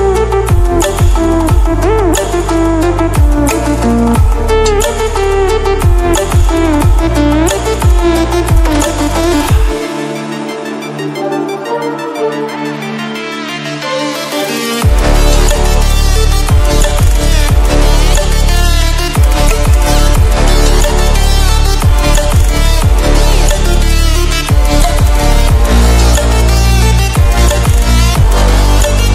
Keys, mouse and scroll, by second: 0.5-1.2 scroll down 1, 1.6-3.2 scroll up 1, 4.0-5.6 drag, 5.6 ctrl+w, 8.7 ctrl+w, 11.6 ctrl+shift+click, 17.3 Up, 18.0 Left, 18.4 Up, 19.0 Left, 20.0 Down, 24.5 click, 25.4 scroll down 1.